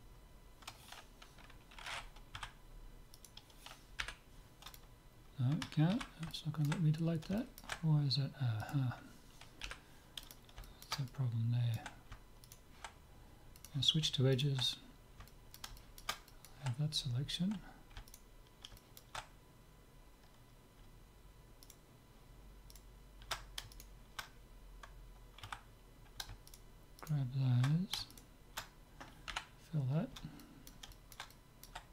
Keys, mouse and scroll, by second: 2.4 a, 3.3-5.2 right drag, 4.0 Delete, 5.9 ctrl+z, 6.3-10.5 middle drag, 8.6 click, 9.7 Delete, 10.7-12.4 middle drag, 12.4 click, 12.4-14.2 right drag, 13.6-16.1 drag, 14.4-16.3 right drag, 16.3-18.2 middle drag, 18.2-20.0 right drag, 18.8-19.8 drag, 20.0-21.4 middle drag, 21.7-25.7 right drag, 25.5 a, 26.5-30.0 right drag, 29.3 f, 29.8-31.9 middle drag.